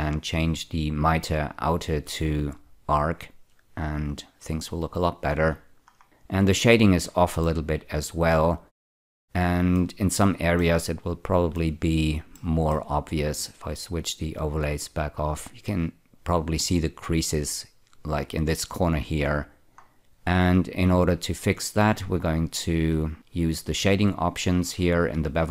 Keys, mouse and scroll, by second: 1.6 click, 2.9 click, 5.2 scroll down 5, 6.0 scroll down 2, 7.5-9.9 middle drag, 10.6-13.0 shift+middle drag, 14.4 click, 19.5 scroll down 2, 22.7-23.8 scroll down 7, 23.8 click, 24.6-25.5 scroll down 4.